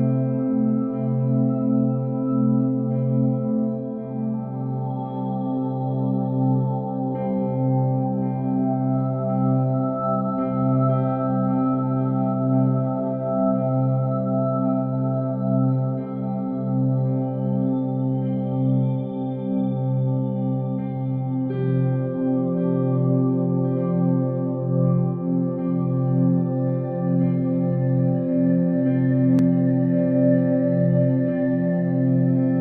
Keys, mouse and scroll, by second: 0.2 alt+click, 0.7 ctrl+b, 2.9 Tab, 4.0 ctrl+1, 4.6-6.6 right drag, 6.6 KP_3, 7.3-8.1 scroll down 8, 8.1-9.0 shift+middle drag, 9.0 g, 10.5 s, 11.2 r, 13.4 g, 14.6 r, 15.8 g, 17.1-18.5 middle drag, 18.5 KP_1, 19.2 KP_3, 20.3-20.9 scroll up 2, 20.9-21.9 shift+middle drag, 21.9 KP_7, 22.8-24.2 scroll down 3, 24.2-27.0 right drag, 27.0 shift+d, 29.7 shift+r, 29.9-30.4 shift+r, 31.0 shift+r, 31.4 drag, 31.7-32.5 middle drag, 32.5-32.6 scroll down 2.